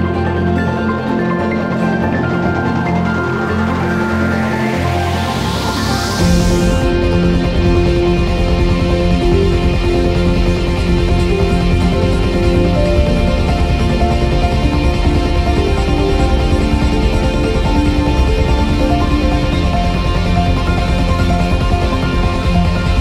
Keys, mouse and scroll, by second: 0.3-0.7 drag, 1.1-2.4 alt+drag, 2.4 e, 5.6 click, 6.6 s, 7.6 click, 7.7 ctrl+z, 8.1 ctrl+z, 8.6 click, 9.2 s, 9.8 click, 9.9 ctrl+z, 11.9 click, 12.4 s, 13.3 click, 13.5 ctrl+z, 14.4 click, 14.5 ctrl+z, 15.1-16.6 drag, 16.6 scroll down 1, 17.4 scroll up 1, 17.8 shift+middle click, 18.1 click, 18.8 2, 18.9 click, 19.5 ctrl+r, 20.3 click, 20.6 shift+middle click, 21.3 click, 22.1 ctrl+r.